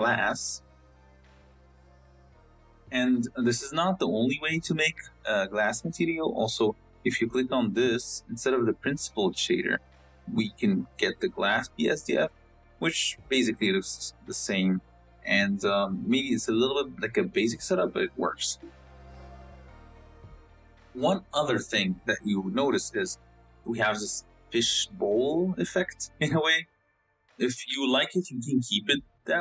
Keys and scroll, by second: 0.4 s.